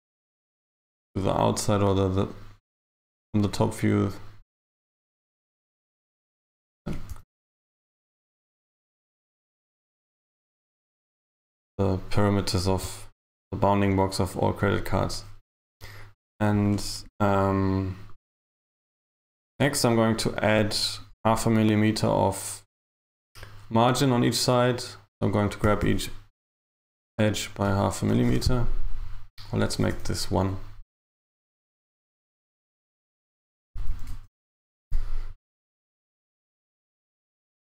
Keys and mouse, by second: 0.9 right click, 2.8 g, 7.2 g, 10.3 right click, 11.0 g, 18.1 right click, 25.7 g, 30.0 g, 32.9 right click, 33.5 g, 36.5 g.